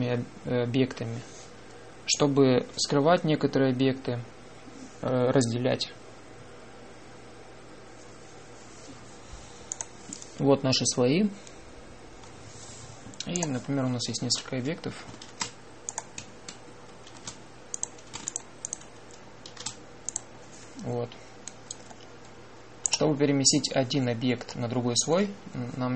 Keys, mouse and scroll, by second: 14.2-16.1 drag, 16.1 shift+d, 17.9 shift+d, 19.2-21.2 drag, 20.3 shift+d, 23.8 click, 25.3-25.9 drag.